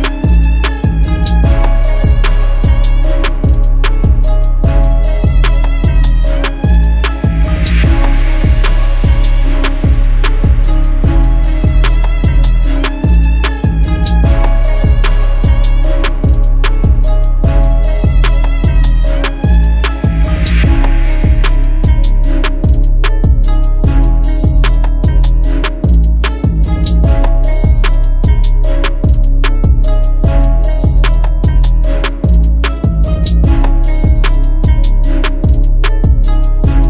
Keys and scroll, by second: 5.7 shift+F2, 6.2 Escape, 9.2 ctrl+r, 10.5 ctrl+r, 11.6 ctrl+r, 13.6 ctrl+r, 14.2 ctrl+z, 17.8 ctrl+r, 18.7 ctrl+r, 19.5 ctrl+r, 19.9 ctrl+r, 20.3 ctrl+r, 21.1 ctrl+r, 21.7 ctrl+r, 26.4 ctrl+r, 27.0 Escape, 29.0 ctrl+r, 29.6 Escape, 32.7 ctrl+r, 34.9 ctrl+g.